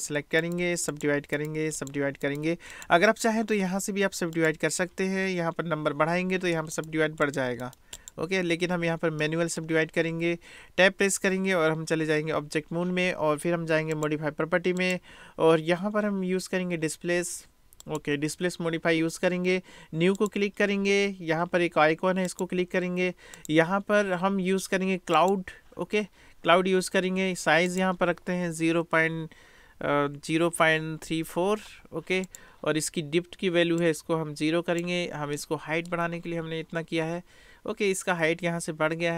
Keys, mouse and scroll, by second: 0.5 right click, 1.4 right click, 2.2 right click, 6.9 click, 7.4 right click, 7.7 click, 7.9 right click, 8.1 click, 9.3 middle click, 11.3 Tab, 13.9 click, 14.8-18.0 drag, 20.3 click, 23.4-25.5 drag, 27.7-32.3 drag, 32.3 middle click, 33.9 middle click, 35.4-36.2 middle drag, 37.2-38.9 middle drag.